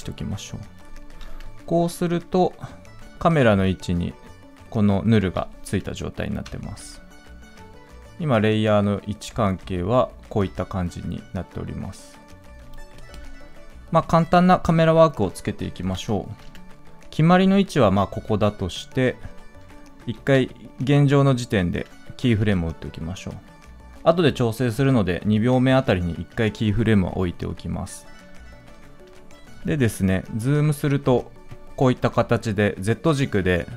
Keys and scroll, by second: 20.0 ctrl+z.